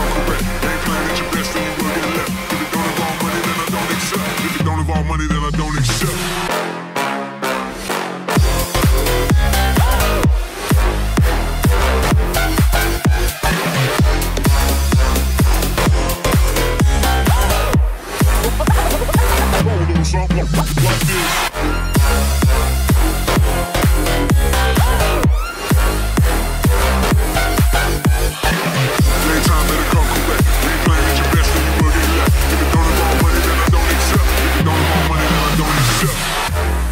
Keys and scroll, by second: 2.8 ctrl+j.